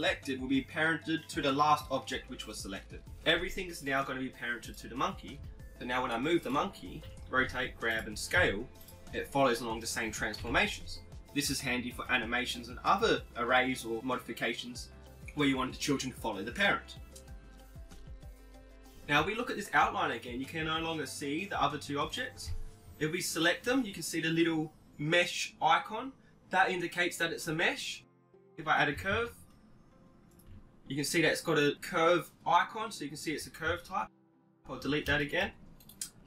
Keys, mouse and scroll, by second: 4.6-6.5 right drag, 5.3 g, 7.1 KP_7, 7.5 r, 8.4 s, 10.5 KP_1, 19.2-21.8 middle drag, 23.5-26.6 right drag, 29.6 shift+a, 35.9 x.